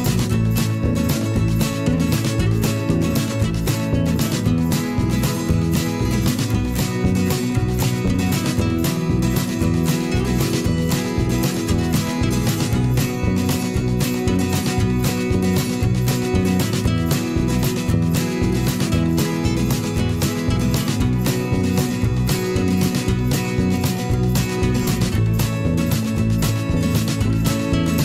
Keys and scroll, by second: 4.3 ctrl+[, 4.7 ctrl+], 7.0 ctrl+z, 15.8 ctrl+shift+[, 15.9 ctrl+], 17.5 shift+Up, 18.4 Down, 21.3 ctrl+shift+[, 23.4 ctrl+[, 23.6 ctrl+], 24.2 ctrl+], 25.9 ctrl+shift+[, 26.0 ctrl+], 26.8 ctrl+shift+[, 26.9 ctrl+], 27.7 ctrl+shift+], 27.9 ctrl+[.